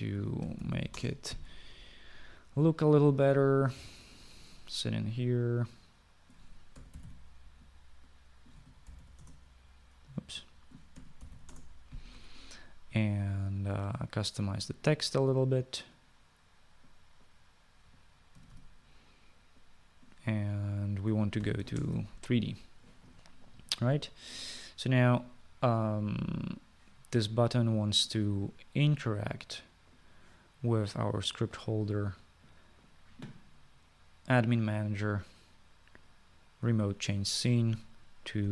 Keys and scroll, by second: 0.0-0.3 typing, 1.5-2.5 typing, 7.8-8.6 typing, 9.6-10.8 typing, 12.0-12.8 typing, 12.8 Return, 19.4-20.1 typing, 22.5-23.2 typing.